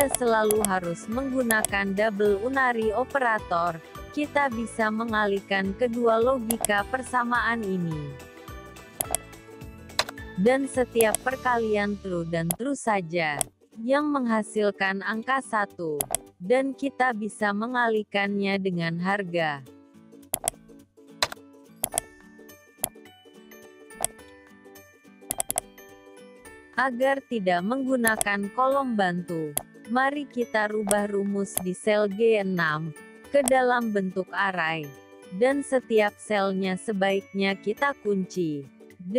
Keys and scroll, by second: 37.1 F4.